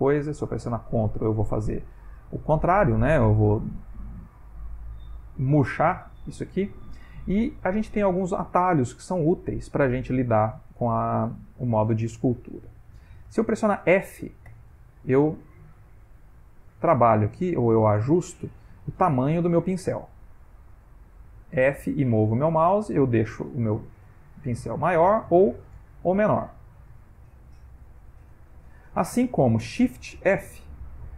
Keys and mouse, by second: 0.5 ctrl+click, 6.4-6.8 middle click, 6.5 middle click, 8.0-8.4 ctrl+middle click, 8.5-9.0 shift+middle click, 9.4 ctrl+middle click, 10.1 middle click, 14.5 f, 19.8 click, 21.5 f, 23.8 click, 25.0 f, 27.6 click, 30.8 shift+f.